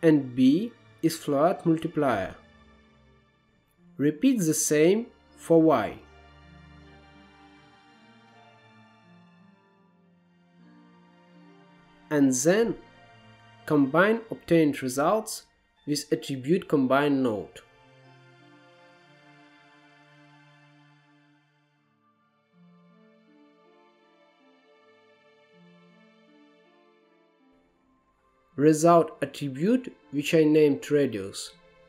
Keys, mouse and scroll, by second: 4.3 click, 5.5 shift+d, 6.6 click, 7.0 middle click, 7.3-8.3 drag, 8.4-9.4 drag, 9.4-9.9 scroll down 1, 9.9-10.6 drag, 10.6 scroll down 1, 10.7 middle click, 11.3 middle click, 11.9 click, 12.2 shift+a, 18.6 click, 19.5 middle click, 19.7-20.3 scroll up 3, 20.3-23.8 drag, 24.1 middle click, 24.5-27.6 drag, 27.7 scroll down 1, 27.9-29.5 middle drag, 29.5 click, 31.0-31.8 drag.